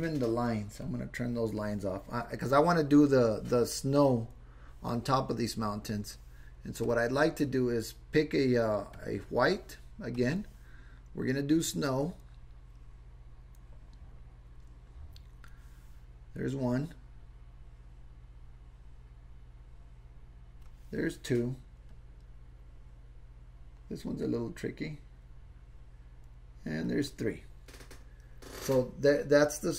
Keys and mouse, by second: 0.8 click, 6.9 click, 11.6-15.5 drag, 16.6-20.6 drag, 21.9-26.9 drag.